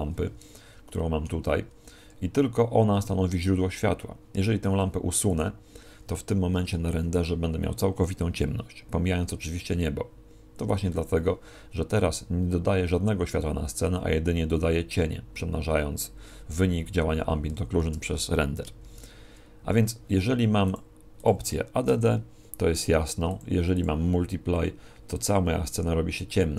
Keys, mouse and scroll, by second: 0.6-1.4 scroll down 2, 0.9 middle click, 17.5 Escape, 18.8 shift+a, 20.6 click.